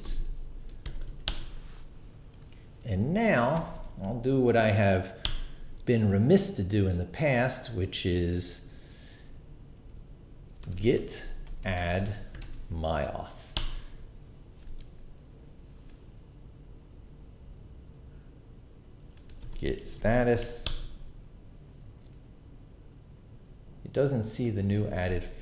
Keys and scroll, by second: 0.3 super+Escape, 0.6-1.6 typing, 3.6 shift+;, 3.8 shift+q, 4.8 q, 5.2 Return, 10.4-12.3 typing, 12.4 Tab, 13.6 Return, 19.1-20.4 typing, 20.6 Return.